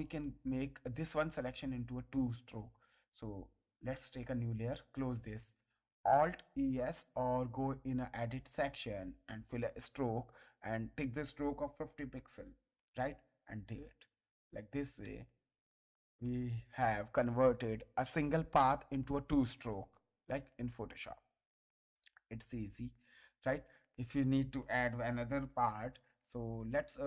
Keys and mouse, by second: 0.7 ctrl+click, 3.7 click, 4.8 click, 7.5 click, 9.3 click, 12.0 KP_5, 12.3 KP_0, 12.8 Return, 12.8 KP_Enter, 14.6 ctrl+d, 15.0 ctrl+space, 15.2 ctrl+click, 17.0 click, 18.3 click, 20.3 space, 20.7 click, 22.0 ctrl+click, 23.2 click, 25.3 alt+e.